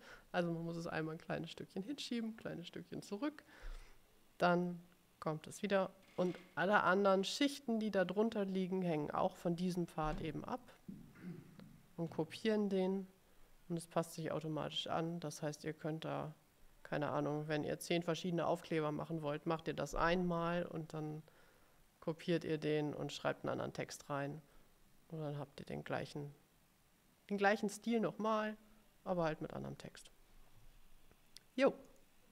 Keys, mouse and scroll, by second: 32.0 click.